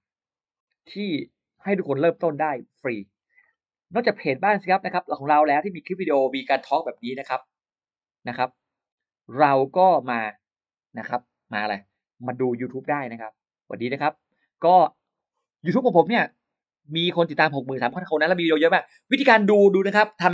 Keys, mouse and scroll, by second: 1.9 click, 3.0-3.3 scroll down 1, 5.0-6.2 drag, 10.0-10.3 scroll down 1, 13.0-13.3 scroll down 1, 14.7-15.0 scroll down 1.